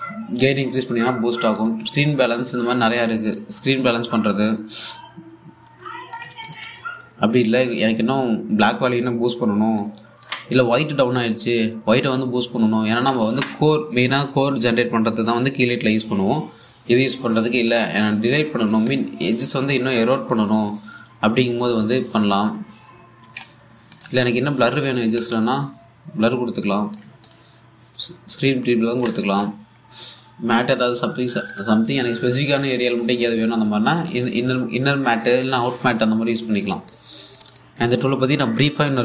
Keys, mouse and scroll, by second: 4.0-13.9 drag, 19.5-29.9 drag, 25.9 typing, 30.5-31.2 scroll down 1, 31.4 click, 37.4 alt+click, 38.0 typing.